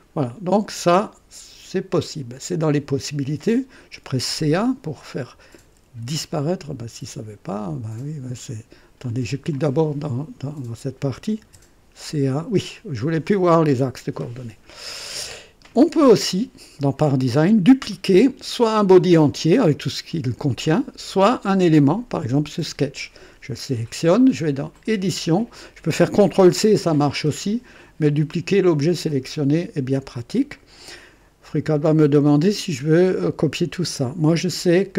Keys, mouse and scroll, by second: 1.9 click, 3.8-6.0 typing, 4.9 click, 8.3 right click, 9.0 click, 9.5 click, 11.1-11.4 typing, 14.2-15.3 drag, 17.3 click, 24.7 click, 29.9 click.